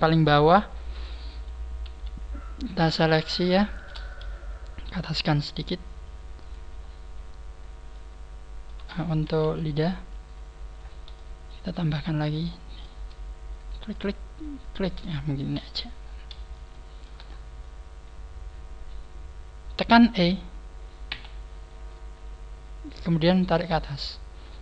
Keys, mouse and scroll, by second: 0.1 middle click, 1.6 scroll down 3, 1.8 KP_3, 2.0 middle click, 2.7-3.2 scroll down 2, 3.4 shift+middle click, 4.8 shift+middle click, 6.3 g, 6.6 click, 6.7-7.3 scroll up 6, 7.8 middle click, 8.8 scroll down 6, 9.0 g, 9.2 KP_3, 10.7 scroll down 1, 10.7 KP_1, 11.1 middle click, 11.1 scroll up 3, 12.1-12.6 scroll up 2, 12.3 middle click, 13.5 shift+right click, 13.9 shift+right click, 14.6 shift+right click, 15.4 scroll down 3, 15.4 KP_3, 15.9 scroll down 3, 16.6 shift+middle click, 17.1-17.7 scroll up 8, 18.5 shift+right click, 18.5 KP_3, 21.1 e.